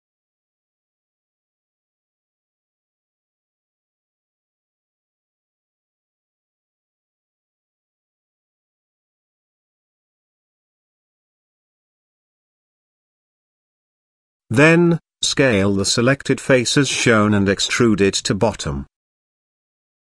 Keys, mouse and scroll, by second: 0.9 scroll up 1, 1.0 middle click, 1.9 shift+middle drag, 2.9 s, 5.0 middle click, 6.0 shift+middle click, 7.3 middle click, 7.4-8.1 scroll up 1, 8.1 shift+middle click, 8.8 g, 10.4-10.7 middle drag, 10.9 shift+scroll up 1, 10.9 shift+middle click, 11.6-11.9 shift+middle drag, 12.4 Tab, 13.7 click, 14.7 i, 17.0 middle click, 17.6 e, 19.2 KP_0.